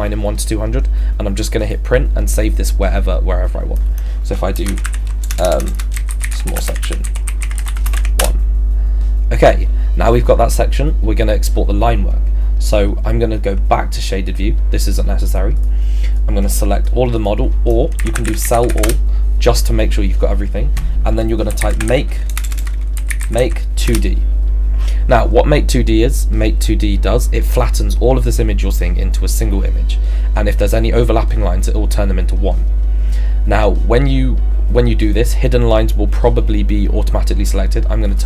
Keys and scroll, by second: 4.9-7.3 typing, 8.2 Return, 17.7-19.1 typing, 21.3-23.9 typing.